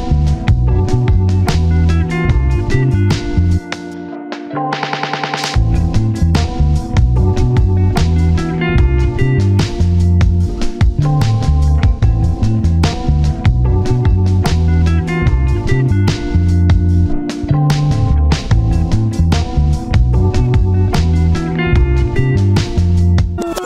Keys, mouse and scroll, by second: 0.2 1, 1.2 scroll up 1, 1.3 scroll down 1, 1.5 1, 1.6 scroll up 1, 1.7 1, 2.4-3.2 scroll up 1, 5.2 ctrl+z, 5.6 shift+click, 6.0-8.1 typing, 7.0 scroll down 1, 9.4-11.0 typing, 10.1-11.0 scroll up 1, 12.8-13.6 typing, 16.5 scroll up 1, 16.7 typing, 17.7 double click, 19.5 scroll down 1, 19.7 typing, 20.3 shift+click, 22.9 alt+z.